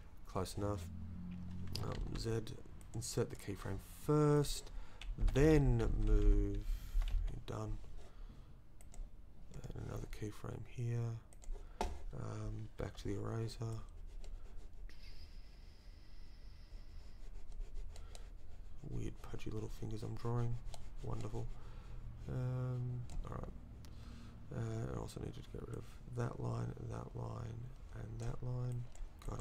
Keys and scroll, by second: 1.8 ctrl+Left, 2.0 ctrl+z, 2.8 z, 5.2 Left, 5.8 Down, 6.0 Left, 6.5 Left, 12.8 e.